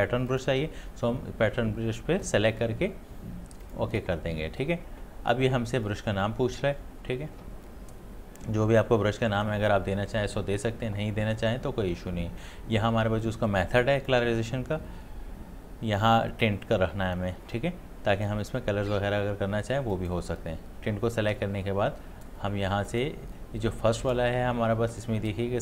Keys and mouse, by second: 3.6 click, 14.0 click, 19.9 click, 22.9 click.